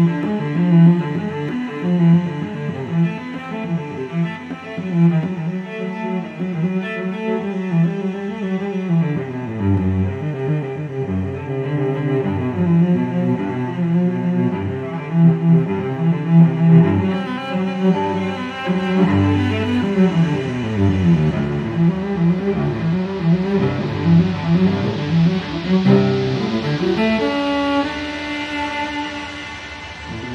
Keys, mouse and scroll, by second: 1.0 click, 2.5 click, 5.7 click, 7.4 click, 9.3 click, 10.9 click, 13.3 click, 15.6 click, 19.2 click, 20.7 click, 23.5 click, 25.9 Escape, 27.1-27.5 scroll down 2, 28.1 scroll up 2.